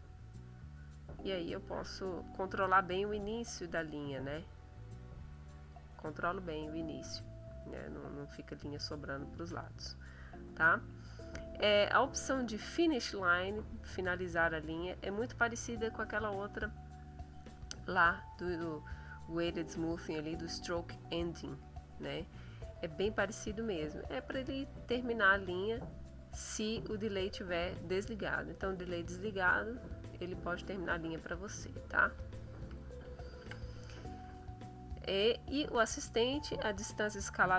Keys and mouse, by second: 1.7 middle click, 4.0-5.9 drag, 18.2 click, 19.0 click, 21.0 click, 21.7 click, 23.2 click, 24.5 click, 25.8 click, 27.2 click, 29.5 click, 31.0 click, 33.0 ctrl+z.